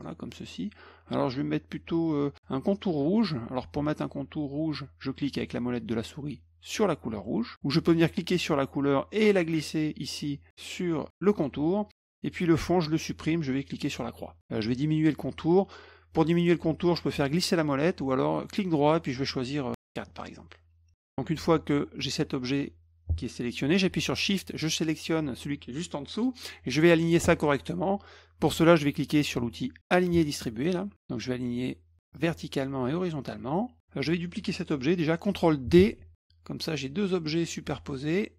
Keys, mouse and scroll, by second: 7.2 middle click, 8.0-11.4 drag, 13.9 click, 17.0 middle click, 17.0-17.5 scroll down 4, 17.4 middle click, 18.5 right click, 20.0 click, 24.3 shift+click, 30.1 click, 32.1 click, 32.8 click, 35.7 ctrl+d.